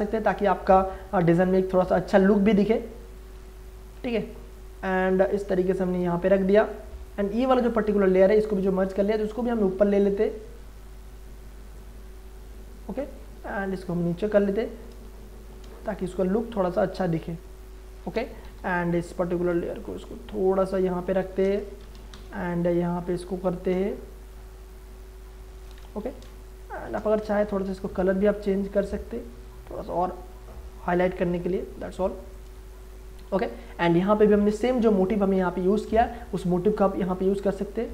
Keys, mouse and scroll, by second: 1.9 ctrl+space, 2.2 ctrl+click, 2.5 ctrl+space, 3.0 click, 3.3 ctrl+space, 3.7 ctrl+click, 4.1 v, 4.5-15.0 drag, 15.0 space, 16.0-18.4 drag, 18.4 m, 19.0 click, 19.7 v, 20.0-21.8 drag, 21.7 ctrl+d, 22.1 m, 22.5 click, 23.7 v, 24.3-26.0 shift+drag, 26.0 ctrl+d, 26.3 space, 26.5 ctrl+click, 27.5 ctrl+u, 28.5-32.3 drag, 32.3 click, 32.6 space, 32.8 ctrl+click, 34.5 v, 36.7-37.9 drag.